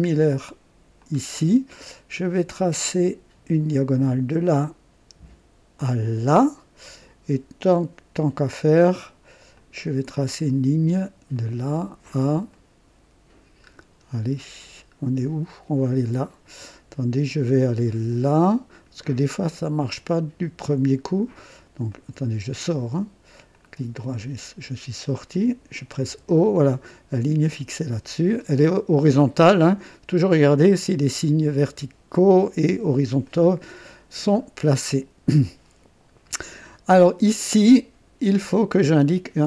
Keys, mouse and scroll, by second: 1.0 click, 3.9 click, 6.0 click, 6.5 typing, 9.5 click, 10.3 right click, 11.4 right click, 12.5 right click, 13.7-14.2 scroll down 1, 14.3 scroll up 1, 15.0 scroll down 1, 18.1 click, 18.7 right click, 21.9 right click, 23.5 click, 25.3 click, 26.1 o, 27.4 click, 33.3 right click, 34.4 scroll up 1, 34.9 right click, 36.6-36.9 scroll up 1, 37.3 right click.